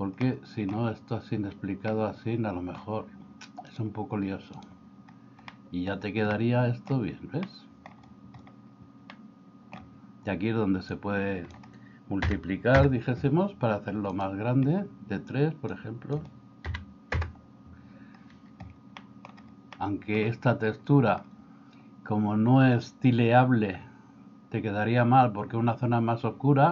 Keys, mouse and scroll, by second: 0.4 middle click, 2.0 middle click, 3.8 click, 5.5 middle click, 6.4 middle click, 7.5 middle click, 9.2 middle click, 11.0 click, 12.2 3, 12.8 Return, 15.8-17.2 drag, 19.0 middle click, 19.8 middle click.